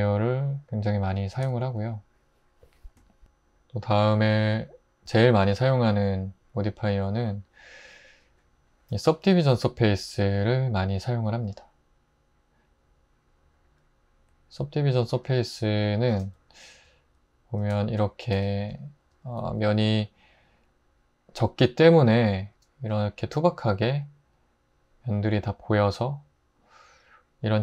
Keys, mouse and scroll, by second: 1.4 x, 16.9 x, 18.3 Tab, 19.4 Tab.